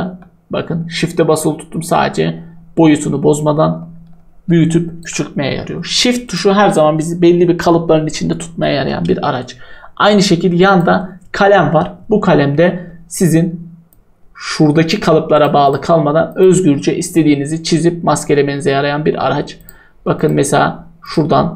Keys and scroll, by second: 6.5 Delete.